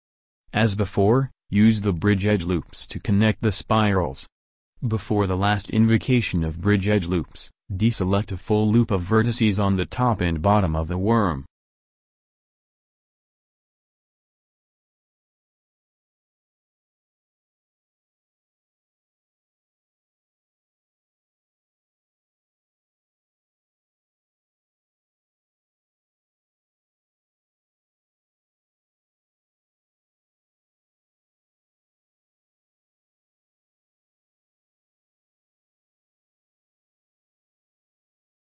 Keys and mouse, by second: 1.9-3.9 drag, 3.9 w, 5.1 a, 7.0 w, 7.9 a, 9.9 w, 12.1-13.1 middle drag, 15.4-17.6 middle drag, 17.0 a, 19.6 middle click, 22.0 c, 25.1 middle click, 26.6 middle click, 28.1 c, 32.0 middle click, 32.8 c.